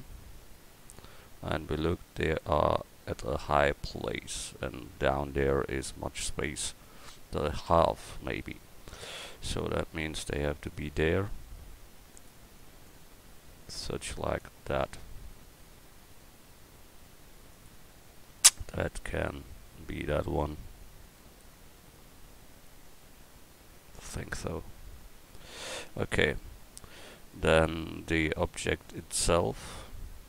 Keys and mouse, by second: 1.1 click, 6.9 KP_1, 10.4-30.2 drag.